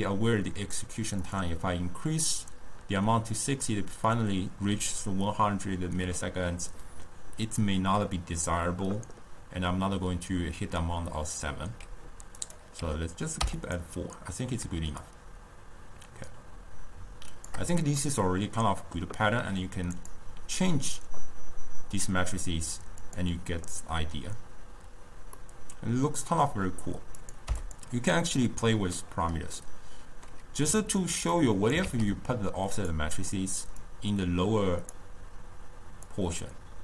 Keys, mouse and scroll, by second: 1.3-4.4 drag, 12.5-13.9 drag, 15.1-18.1 shift+drag, 18.1-20.1 middle drag, 20.1-25.5 drag, 25.5-27.3 middle drag, 27.3 click, 29.1-31.1 middle drag, 31.1 click, 31.5-32.5 drag, 32.5 shift+d, 34.0 drag, 36.2 drag.